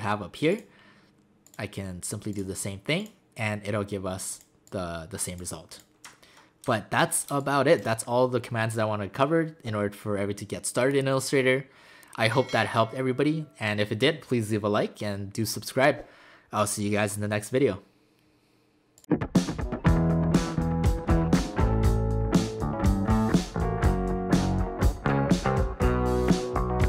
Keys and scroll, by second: 7.3 space.